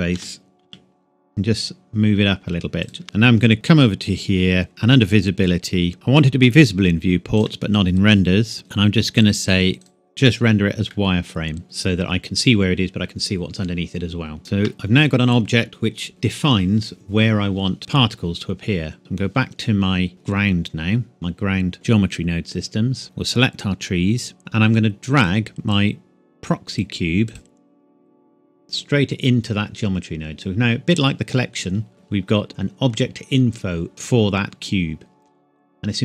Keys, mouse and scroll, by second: 0.2 g, 0.7 z, 2.8 click, 3.0-3.5 scroll up 1, 3.5 click, 5.9 click, 8.5 scroll down 2, 8.6 click, 10.9 middle click, 14.4 ctrl+s, 19.0 click, 23.0 click, 24.4-25.0 shift+scroll up 1, 25.2 click.